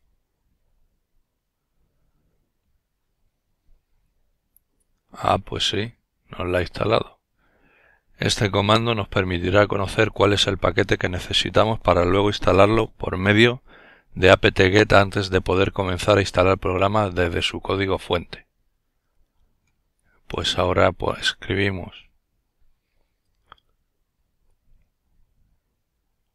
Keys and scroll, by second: 25.1-26.3 typing.